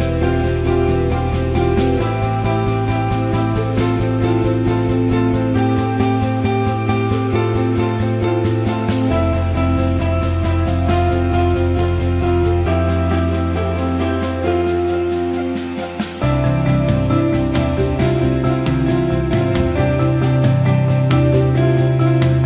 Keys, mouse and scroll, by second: 0.7-1.5 alt+middle drag, 4.0-5.9 drag, 10.5-11.4 alt+middle drag, 12.4-13.6 alt+middle drag, 14.0 alt+middle click, 15.9 click, 16.7 alt+shift+middle drag, 17.2 alt+middle drag, 17.4 alt+shift+middle click, 18.1-20.9 alt+middle drag, 21.3 click, 22.2 alt+shift+middle drag.